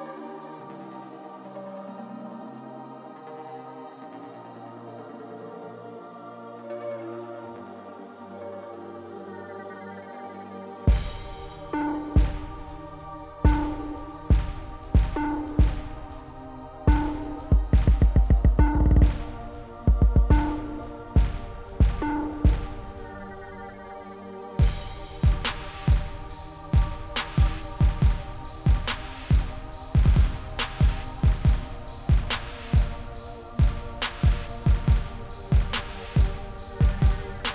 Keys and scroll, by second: 0.0-0.4 typing, 8.6 1, 10.4 0, 17.1 0, 21.1 0, 26.1 s.